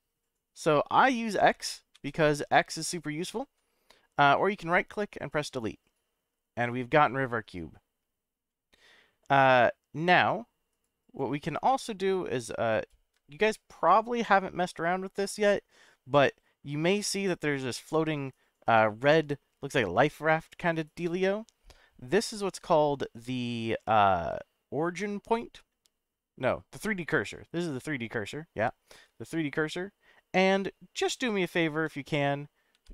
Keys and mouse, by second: 1.1-1.4 middle drag, 1.9 x, 4.3-5.7 right drag, 6.6-7.7 middle drag, 10.8-11.3 right drag, 11.6 drag, 12.7 shift+right click, 13.4-15.8 middle drag, 17.0-18.3 shift+right drag, 19.2-20.9 shift+right drag, 21.1-25.4 shift+right drag, 27.1 shift+right click, 29.3-30.6 middle drag, 32.7 shift+a.